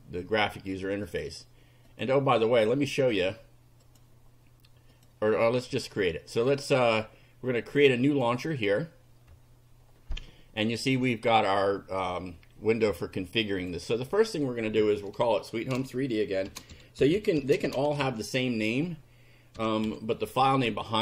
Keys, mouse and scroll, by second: 1.1 click, 1.9 click, 2.6 click, 3.9 click, 5.0 click, 6.3 right click, 8.0 click, 10.8 click, 13.5 click, 16.2-18.5 typing, 19.6 3, 19.8 d.